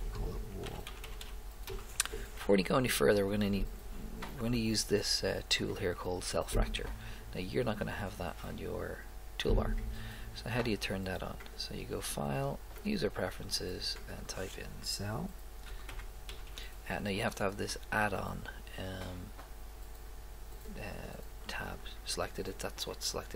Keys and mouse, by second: 1.2 l, 11.5 click, 12.8 click, 13.0 click, 13.2 click.